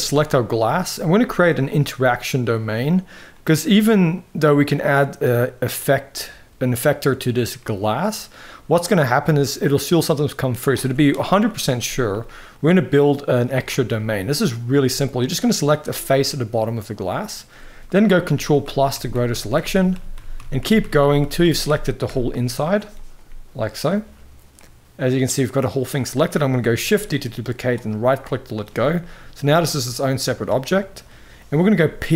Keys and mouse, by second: 0.3 shift+middle drag, 1.1 middle click, 3.1 middle click, 7.3-8.0 middle drag, 11.9-12.9 middle drag, 13.3 Tab, 14.0 middle click, 14.6 shift+middle click, 15.4 click, 16.0 middle click, 17.8 ctrl+KP_Add, 17.9 ctrl+KP_Add, 18.1 ctrl+KP_Add, 18.3 ctrl+KP_Add, 18.6 ctrl+KP_Add, 18.8 ctrl+KP_Add, 19.0 ctrl+KP_Add, 19.3 ctrl+KP_Add, 19.5 ctrl+KP_Add, 19.6 ctrl+KP_Add, 19.9 ctrl+KP_Add, 20.1 ctrl+KP_Add, 20.3 ctrl+KP_Add, 20.5 ctrl+KP_Add, 20.7 ctrl+KP_Add, 20.9 ctrl+KP_Add, 21.1 ctrl+KP_Add, 21.4 ctrl+KP_Add, 21.8 ctrl+KP_Add, 24.3-25.5 middle drag, 26.7 shift+d, 27.8 middle click, 28.7 g, 30.5 shift+middle click, 31.5 p.